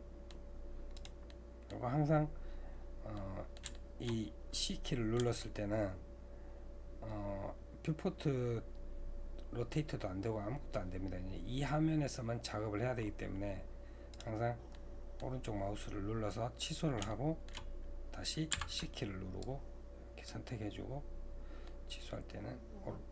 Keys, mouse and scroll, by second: 1.3-5.2 middle drag, 5.2 c, 14.7 middle click, 15.7-17.1 scroll down 2, 17.1 shift+middle click, 17.7-18.2 scroll up 2, 18.2-18.5 scroll down 2.